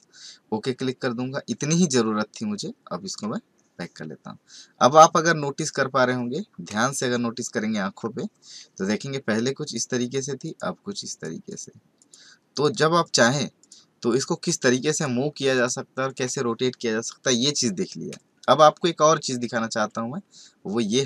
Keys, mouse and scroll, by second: 3.0 click, 6.7 alt+Num_Lock, 6.9-8.0 alt+scroll up 5, 8.3-9.6 scroll up 3, 9.6 click, 10.4 click, 11.1 click, 11.5 click, 12.0 click, 13.0 click, 13.6 click, 14.9 click, 15.5 click, 16.0 click.